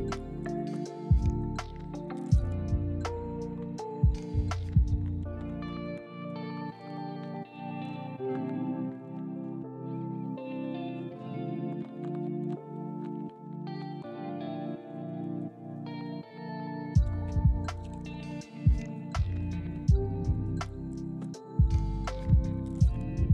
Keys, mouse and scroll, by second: 0.5 s, 1.0 g, 1.9 ctrl+click, 2.1-2.5 scroll up 1, 2.5-3.0 scroll down 1, 3.1 middle click, 3.1-3.5 scroll down 1, 4.1 middle click, 4.4 e, 8.3 g, 8.9 middle click, 9.5-10.2 scroll down 1, 10.2 middle click, 13.7 ctrl+click, 15.3 ctrl+click, 15.5 middle click, 16.2 1, 16.7 g, 17.9 scroll up 1, 18.0 shift+middle click, 18.1 shift+scroll down 1, 18.2 middle click, 19.6 shift+middle click, 19.7-20.1 scroll down 1, 20.1 middle click, 20.4 shift+a, 22.7 scroll down 1.